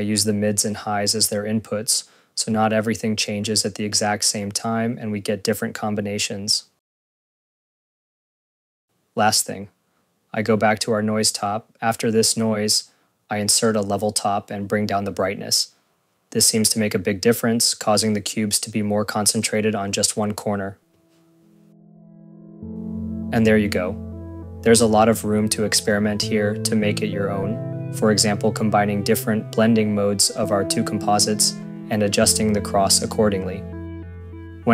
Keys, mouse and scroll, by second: 0.0-3.1 typing, 0.0 click, 0.1 Return, 0.3-0.7 scroll, 0.9 click, 1.3 click, 1.7 scroll, 2.0 shift+click, 2.2 ctrl+c, 2.2 ctrl+v, 2.3 click, 2.8 Return, 2.9 click, 3.2 Return, 3.7 click, 3.9 click, 4.3 click, 4.7 ctrl+c, 4.7 ctrl+v, 4.9 click, 4.9-5.8 typing, 5.4 click, 5.6 click, 5.8 Return, 6.0 click, 6.4 click, 6.5 click, 6.6 click, 6.9 click, 7.0 scroll, 7.1 click, 7.3 click, 7.4 ctrl+s, 8.5 scroll, 8.6 click, 10.8 scroll, 13.4 right click, 14.3-15.6 typing, 16.6 click, 16.7 click, 19.3 click, 20.4 click.